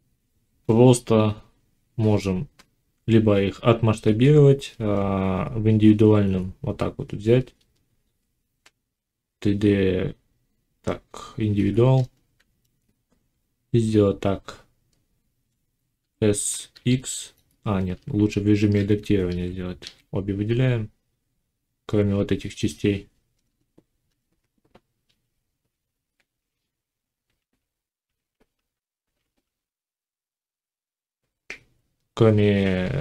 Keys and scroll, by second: 15.8 s, 17.8 Tab, 19.1 a.